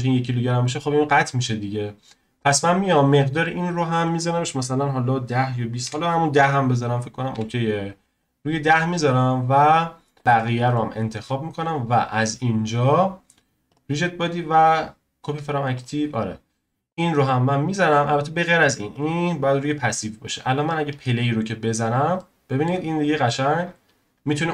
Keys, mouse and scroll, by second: 2.4 click, 4.0-7.1 drag, 10.2 click, 12.0-15.2 drag, 16.9 click, 17.9 click, 18.9-22.2 drag, 22.2-24.5 shift+middle drag.